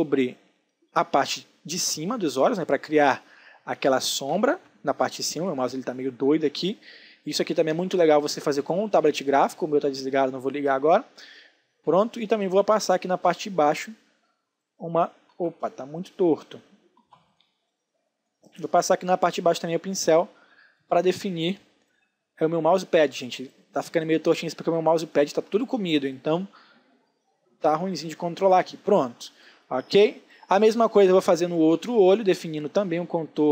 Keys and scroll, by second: 4.1 ctrl+z, 14.8 ctrl+z, 25.0 ctrl+z, 28.5 space.